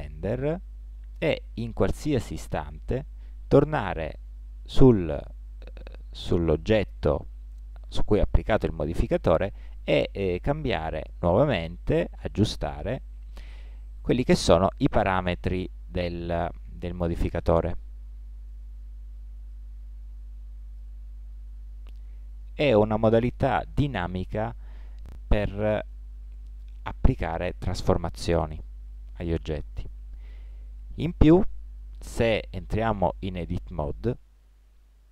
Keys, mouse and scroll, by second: 0.5-3.8 right drag, 4.2 right click, 5.3 middle click, 7.9 middle click, 10.1 middle click, 10.8-12.7 drag, 13.7-15.7 middle drag, 17.2-19.0 drag, 19.0-23.6 middle drag, 26.7 middle click, 33.5 Tab.